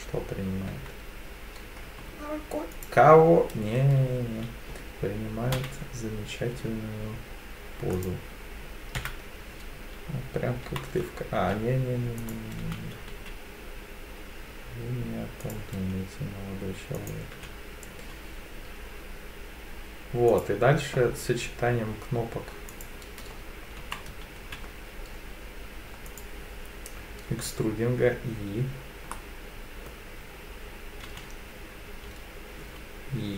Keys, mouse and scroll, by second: 0.7 1, 2.7 alt+click, 5.5 e, 6.5 s, 7.9 click, 9.0 KP_1, 10.6 g, 11.4 z, 12.2 click, 12.6 e, 13.1 z, 15.4 click, 15.7 s, 17.0 click, 17.3 e, 18.0 z, 20.3 click, 22.7 click, 23.8 g, 24.4 z, 26.1 click, 29.1 middle click, 31.1 e, 32.6 s.